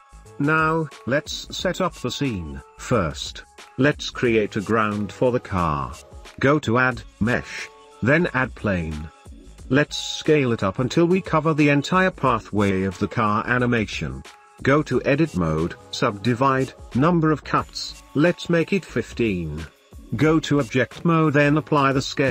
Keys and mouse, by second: 0.0 middle click, 0.6-1.5 shift+middle drag, 1.5 n, 2.0 n, 4.2-5.2 middle drag, 5.4 shift+middle click, 6.1-8.0 drag, 9.2 KP_7, 9.6 shift+middle click, 10.2 ctrl+s, 11.2 s, 12.6 click, 12.8 s, 12.9 click, 13.2 g, 13.2 click, 13.7 g, 13.8 click, 14.4 g, 16.2 Tab, 17.1 w, 17.9 click, 19.9 Tab, 21.0-22.2 drag.